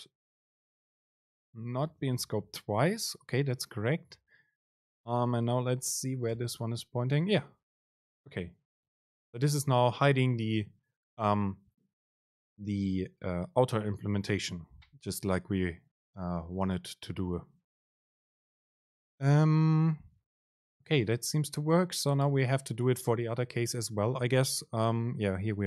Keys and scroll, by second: 6.5 super+b.